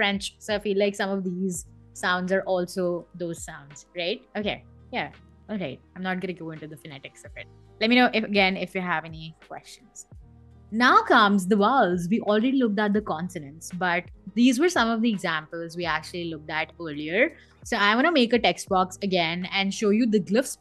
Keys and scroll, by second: 17.3 t, 19.0 Escape.